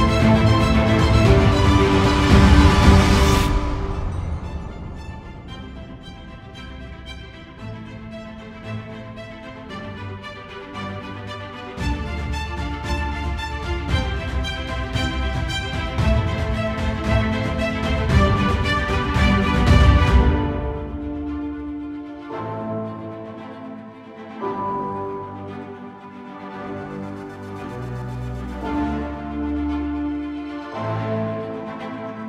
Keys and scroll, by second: 1.8 ctrl+z, 26.2 ctrl+z, 26.6 ctrl+=, 27.6 space, 30.4 ctrl+z.